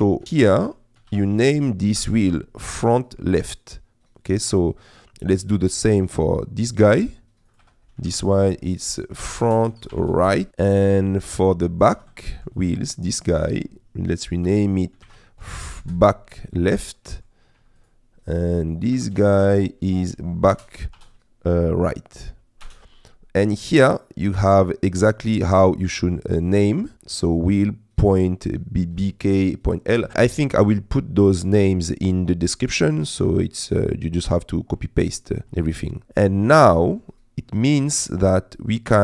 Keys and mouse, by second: 0.4 F2, 6.2 click, 7.7 F2, 14.5 F2, 16.7 middle click, 17.8 click, 18.8 click, 18.9 F2, 36.6 middle click.